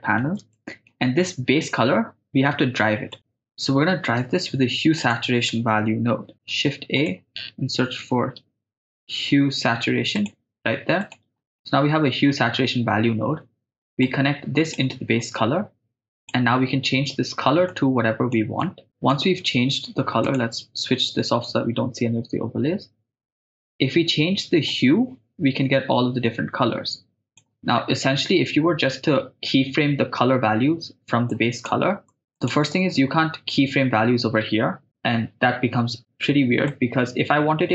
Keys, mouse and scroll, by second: 0.5 shift+middle click, 3.1 middle click, 4.4 shift+a, 6.2 h, 6.3 u, 6.5 right click, 6.5 e, 6.8 shift+a, 11.6-12.3 ctrl+middle drag, 14.1-15.2 drag, 16.2 click, 18.9-19.3 drag, 20.3 click, 24.7-27.4 drag, 31.3-31.7 drag, 32.1 middle click, 32.3 click.